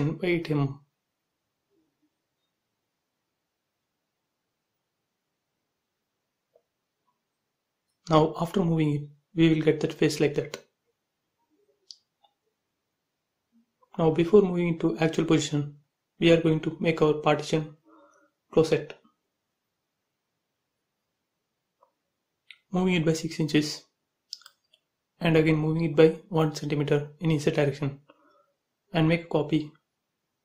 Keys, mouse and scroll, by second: 0.4 click, 1.7 Left, 5.2-6.8 middle drag, 6.8 click, 6.9 space, 7.0 scroll up 1, 7.1 scroll down 1, 8.3 middle click, 8.8-9.1 scroll down 1, 9.1 click, 9.5 middle click, 10.1 click, 10.5 shift+middle click, 11.6 scroll up 1, 13.1 m, 13.7 space, 14.6 click, 14.6 click, 15.1-15.9 scroll up 1, 16.1 shift+x, 16.5 middle click, 17.3-17.9 scroll down 1, 18.8 click, 19.6 m, 20.2 ctrl+click, 21.2 Up, 21.8 6, 22.3 shift+', 22.4 Return, 23.6 click, 25.2-27.1 typing, 27.7 ctrl+click, 28.7 Up.